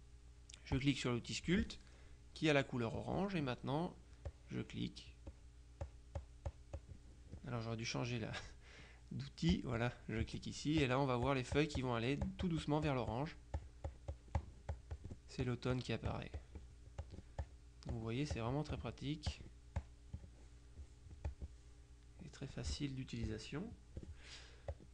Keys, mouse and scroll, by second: 0.8 click, 4.3-6.1 drag, 6.3 click, 9.6 click, 10.9-15.6 drag, 15.8-18.1 drag, 18.4 click, 19.9 click, 21.4 click, 22.6 click, 24.8 click.